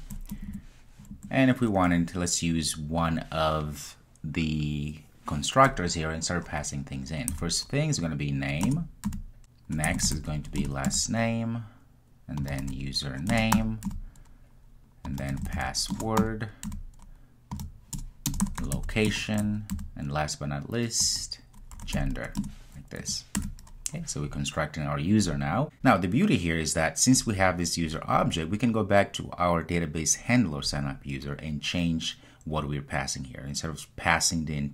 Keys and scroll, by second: 8.7 Return, 10.6 Return, 25.7 super+z.